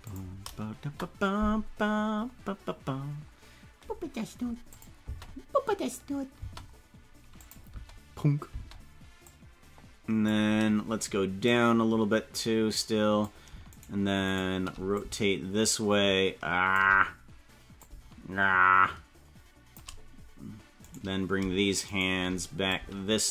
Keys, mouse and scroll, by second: 4.7 click, 5.0 space, 6.5 space, 7.4 click, 7.6 space, 8.5 space, 9.3-10.3 drag, 11.5-13.3 drag, 13.8 shift+right click, 14.5 shift+right click, 14.9-16.7 shift+drag, 17.7-19.9 shift+drag, 20.9 right click, 22.6-23.3 shift+drag.